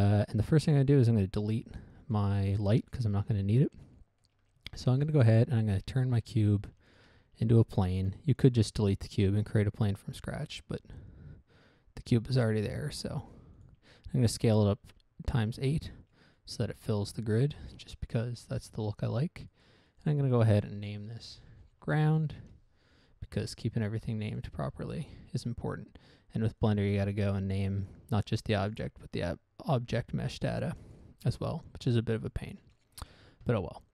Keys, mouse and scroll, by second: 0.3 scroll down 1, 0.3 middle click, 0.7 middle click, 1.2 right click, 2.4 click, 3.4 middle click, 3.7 middle click, 3.9-4.3 scroll up 1, 4.3 middle click, 4.7 middle click, 4.8 scroll up 1, 5.1 shift+middle click, 5.5 right click, 5.8 Tab, 6.9 x, 7.3 click, 8.3 shift+a, 8.8 click, 9.7 s, 13.9 ctrl+click, 14.6 ctrl+click, 15.1 Tab, 15.5 scroll down 1, 15.7 middle click, 15.9 middle click, 16.0-16.5 scroll up 1, 16.5 middle click, 16.7 middle click, 17.0 scroll down 1, 17.4 scroll up 1, 17.9 shift+middle click, 19.9 click, 20.3 click, 20.4 double click, 20.7 double click, 21.6-22.8 typing, 22.8 Return, 24.2 ctrl+c, 24.7 click, 25.3 ctrl+v, 27.0 click, 29.0 click, 31.2 click, 32.2-32.7 scroll down 1, 32.7 middle click, 32.9 middle click, 33.2 shift+middle click.